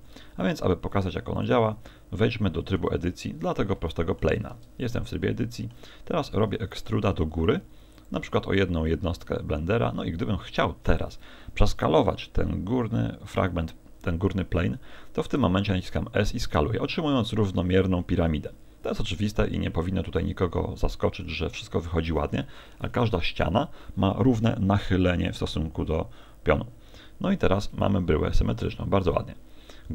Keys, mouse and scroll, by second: 0.0 shift+a, 1.9 middle click, 3.3-3.7 scroll up 3, 3.8 shift+middle click, 4.5 Tab, 4.9 middle click, 6.9 e, 8.0 ctrl+click, 8.4 middle click, 15.4 s, 16.6 click, 16.9 middle click, 20.4 middle click, 22.8 KP_1, 27.9 KP_1, 28.1 KP_3, 28.7 KP_3, 29.1 KP_1.